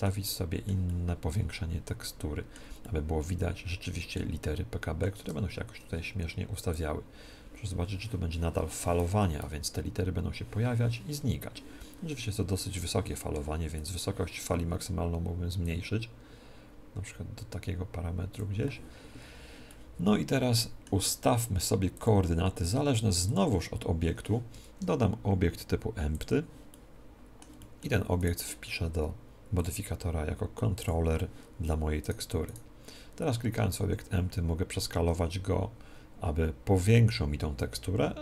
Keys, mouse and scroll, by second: 2.8-6.1 middle drag, 6.6-19.6 drag, 19.6-21.6 middle drag, 21.9-24.6 drag, 24.6 shift+a, 26.6-29.1 middle drag, 28.2-31.1 right drag, 29.5-32.0 drag, 32.0-34.4 right drag, 33.8 s.